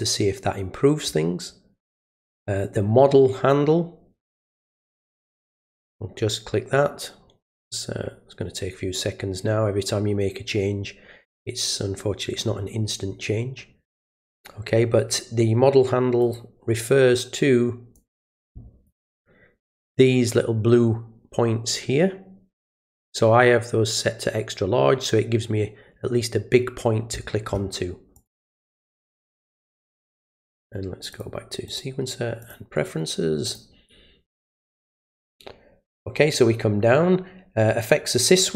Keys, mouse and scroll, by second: 4.8 click, 16.2 click, 18.0 click, 28.2 click, 31.1 click, 31.7 click, 32.4 click, 33.5 click.